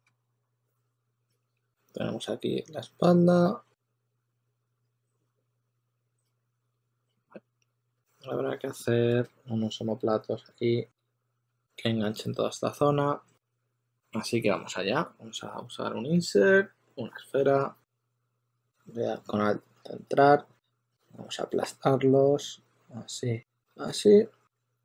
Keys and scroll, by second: 9.2 shift+super+d, 9.7 shift+super+d, 11.8 shift+super+x, 18.3 w, 23.3-24.8 typing.